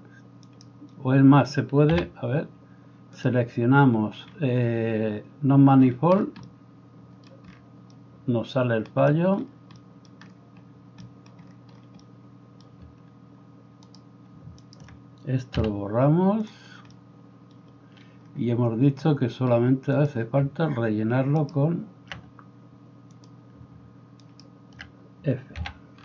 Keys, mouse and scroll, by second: 0.6-1.9 right drag, 1.9 a, 13.9 middle click, 13.9 right click, 14.7 shift+middle click, 14.7 shift+right click, 15.6 x, 20.3-21.4 alt+middle drag, 21.4 alt+right click, 22.2-23.3 middle drag, 23.3-26.0 alt+drag, 24.3 alt+right click, 25.7 f.